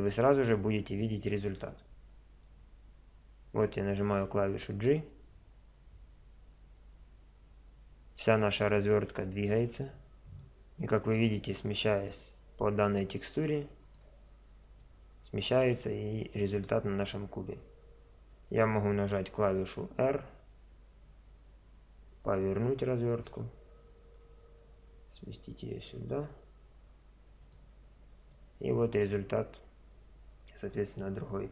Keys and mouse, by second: 0.4 middle click, 4.9 g, 14.9 middle click, 15.0 middle click, 15.6-16.6 middle drag, 20.0 r, 24.3 g, 29.3-30.3 middle drag.